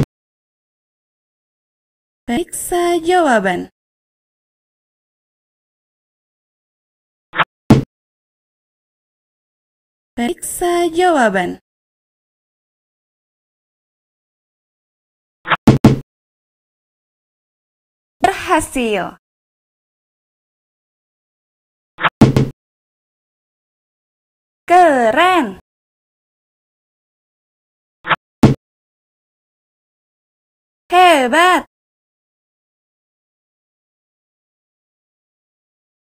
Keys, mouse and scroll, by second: 4.3 click, 7.1 click, 12.5 click, 15.2 click, 21.7 click, 27.8 right click, 34.1 click.